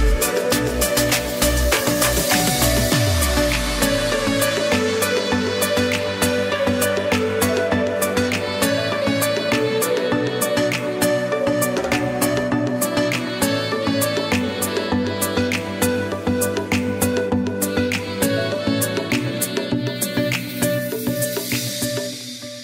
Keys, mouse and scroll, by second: 2.9 click, 4.5 [, 4.8 [, 6.6 typing, 6.9 click, 7.6 space, 7.8 click, 8.2 space, 8.5 click, 17.4 click, 19.9 space, 20.1 click, 20.5 space, 21.0 click, 21.4 space, 21.5 click, 21.9 space.